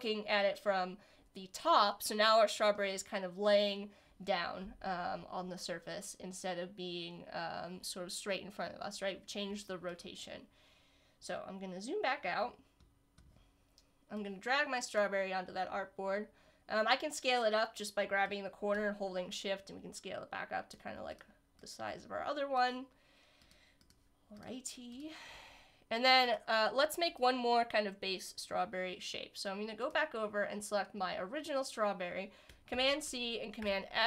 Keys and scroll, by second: 32.7 super+c, 33.6 super+f.